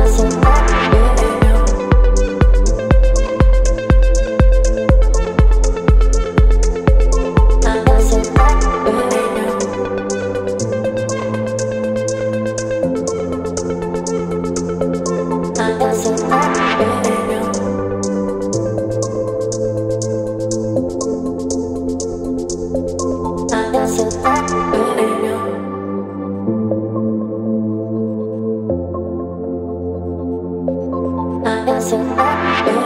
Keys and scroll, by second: 2.5 Return, 3.7 space, 8.5 space, 10.9 space, 13.8 b, 23.5 space, 25.7 v, 26.3 space, 28.6 space.